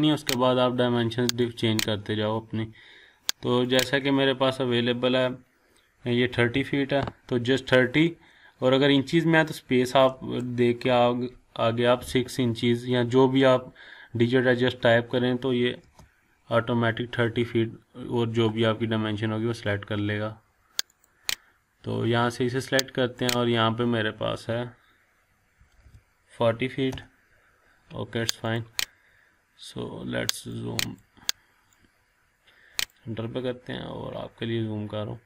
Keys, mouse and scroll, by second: 0.0 click, 3.6 click, 6.1-7.0 typing, 10.1 space, 15.8 Return, 20.9 click, 23.2 click, 25.3-26.3 typing, 26.9 Return, 28.4 click, 29.2-29.5 scroll up 1, 30.5-31.1 drag, 33.4-33.7 scroll up 1.